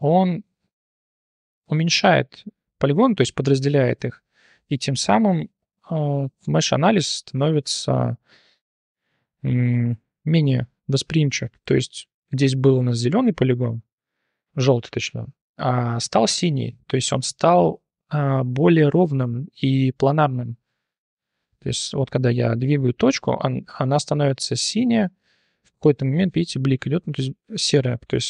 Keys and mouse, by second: 6.4 Tab, 8.4 click, 9.6 click, 10.0 middle click, 11.0 middle click, 11.5 click, 12.0 middle click, 14.0 middle click, 15.9 click, 16.8 middle click, 18.6 click, 21.0 click, 21.8 click, 22.2 g.